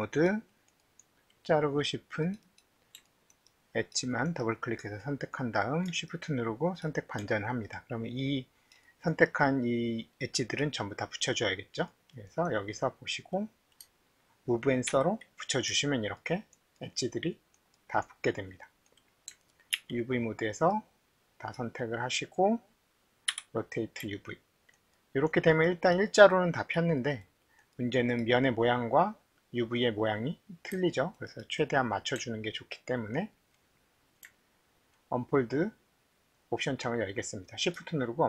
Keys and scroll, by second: 23.3 c.